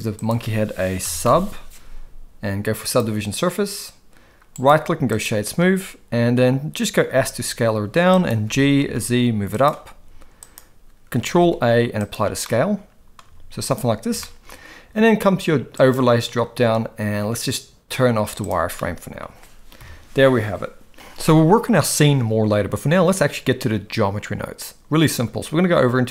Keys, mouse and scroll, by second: 4.5-5.2 right drag, 7.1 s, 8.4 g, 9.9 s, 11.3 ctrl+a, 12.4-13.1 middle drag, 13.2 s, 14.2 shift+middle click, 15.9-18.6 drag, 18.7-19.2 middle drag, 19.8 KP_1, 21.2-21.6 middle drag.